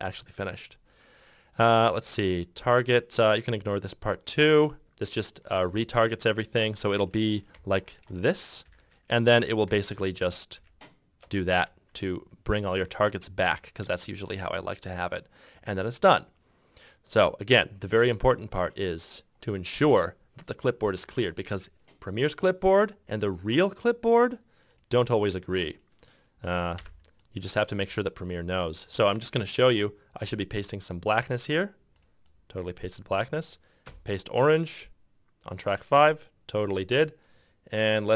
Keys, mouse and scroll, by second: 7.9 shift+9, 8.8 shift+5, 10.7 shift+9, 14.0 ctrl+F6, 26.9 c, 28.0 f, 30.4 r, 32.4 f, 34.0 f.